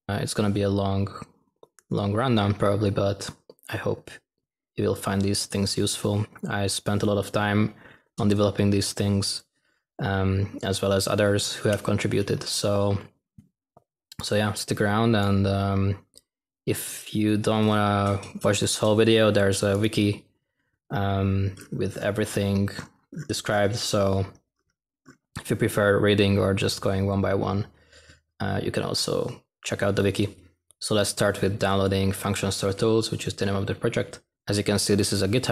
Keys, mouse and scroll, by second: 30.7 x.